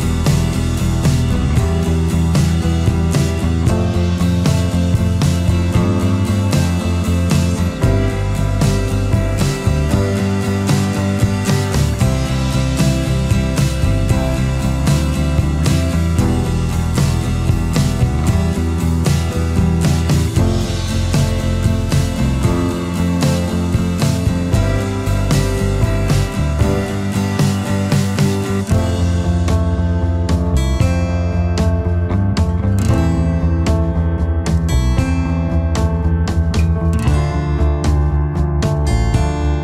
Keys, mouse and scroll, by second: 1.3 alt+click, 6.1 alt+scroll down 1, 6.3 space, 7.0 alt+scroll up 1, 12.0 space, 16.2 space, 20.6 space, 22.8 space, 27.5 space, 29.9 alt+scroll up 1, 34.2 space.